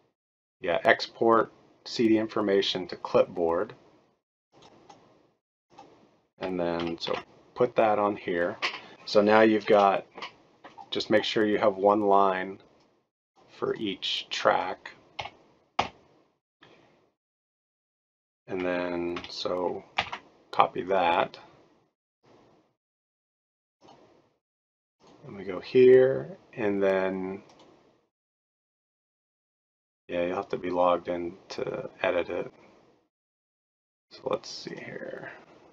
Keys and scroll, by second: 6.8 ctrl+a, 7.1 ctrl+v, 9.7 BackSpace, 13.1 BackSpace, 15.1 Delete, 15.8 Delete, 19.1 ctrl+a, 19.9 ctrl+c, 24.2 ctrl+c.